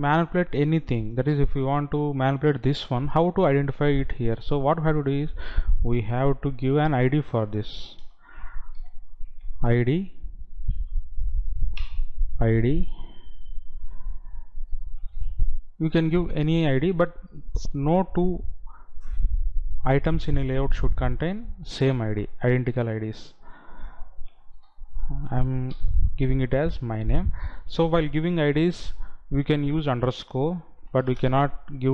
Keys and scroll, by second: 29.0 Left, 31.5 space.